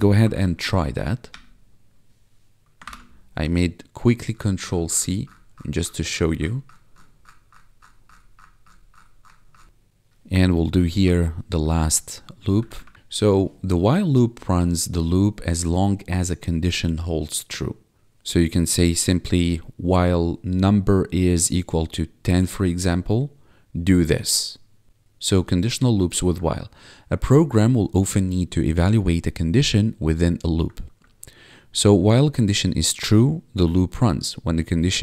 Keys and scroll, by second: 0.4 ctrl+`, 0.9 Up, 1.3 Return, 2.8 ctrl+c, 10.7 Tab, 11.0 Return, 11.5 BackSpace, 12.3 ctrl+Down, 12.9 ctrl+s, 26.5 1, 31.0 1.